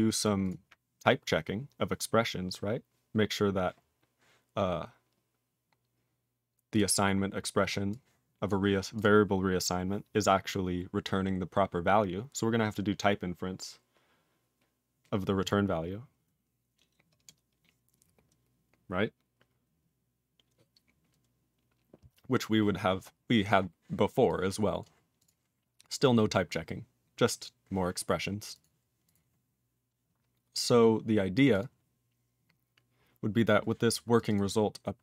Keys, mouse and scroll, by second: 0.1 click, 0.2 click, 0.4 click, 0.5 click, 1.0 click, 4.4 scroll down 2, 6.7 click, 6.7 click, 7.4-7.9 scroll down 2, 7.9 click, 8.4 click, 8.9 click, 9.0 click, 11.3-14.7 scroll up 1, 23.0 scroll down 3, 23.6 scroll down 3, 24.3 click, 24.8 click, 25.2 click, 25.2 click, 25.7 scroll down 2, 28.4 click, 28.4 click, 28.5 double click, 28.6 double click, 29.0 click, 29.1 click, 30.6 click, 31.3 click, 31.5 click, 31.6 click, 34.1 click, 34.2 click, 34.2 double click, 34.3 double click, 34.9-35.0 scroll up 6.